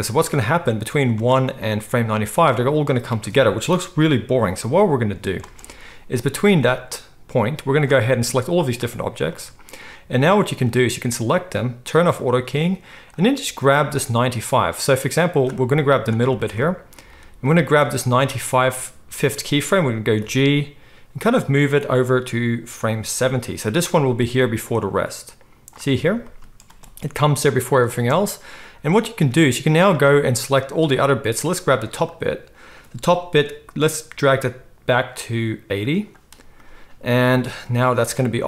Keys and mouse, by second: 1.1 space, 5.4 space, 6.1-8.7 drag, 8.7-10.7 middle drag, 10.7 click, 10.8-12.2 middle drag, 12.2 click, 12.3 middle click, 13.1-16.0 drag, 16.0-17.8 shift+middle drag, 17.8-22.9 drag, 20.2 g, 22.9-23.8 middle drag, 23.8-30.9 drag, 26.7 space, 28.6 space, 30.9-32.0 middle drag, 32.0-36.0 drag, 34.2 g, 36.0-38.1 middle drag, 38.1-38.4 drag.